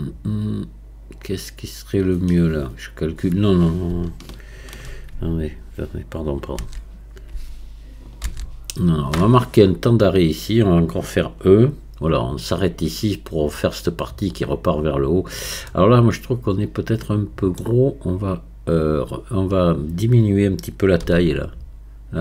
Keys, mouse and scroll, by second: 6.6 ctrl+z, 15.7-18.7 middle drag.